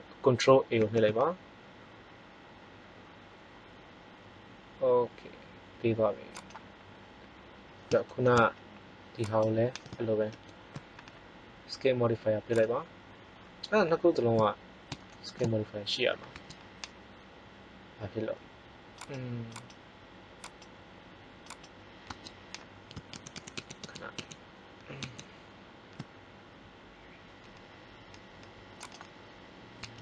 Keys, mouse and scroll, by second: 0.7 ctrl+a, 7.6 middle click, 9.2-11.0 right drag, 10.2 ctrl+l, 12.5 click, 14.6 middle click, 16.3 Tab, 22.0 Tab, 23.0 ctrl+z, 23.2 ctrl+z, 23.5 ctrl+z, 23.7 ctrl+z, 24.0 ctrl+z, 24.9 ctrl+z, 28.8-30.0 drag, 29.7 Tab.